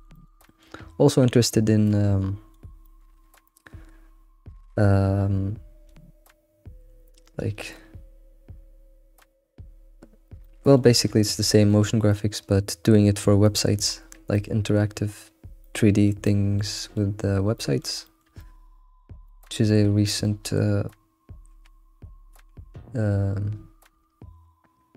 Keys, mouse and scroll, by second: 0.4 middle click, 0.9-1.2 scroll up 2, 1.2 g, 2.8 shift+middle click, 3.3 scroll up 3, 5.6-7.3 scroll down 3, 7.3 scroll down 2, 10.4-14.0 shift+middle drag, 14.0-14.3 scroll down 3, 14.3-17.2 middle drag, 17.2 scroll up 1, 17.5-19.3 middle drag, 20.1 shift+middle click, 20.4-20.9 scroll up 3, 23.9 alt+x.